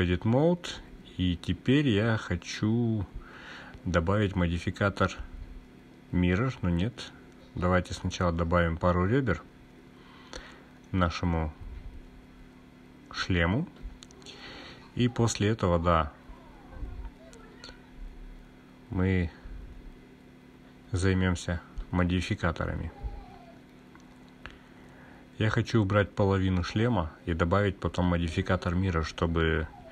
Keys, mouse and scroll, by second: 1.7 click, 2.7-5.7 scroll down 1, 5.9 ctrl+r, 9.0 click, 11.7 ctrl+r, 19.4 click, 22.0 click, 23.8 click, 26.2-27.2 drag.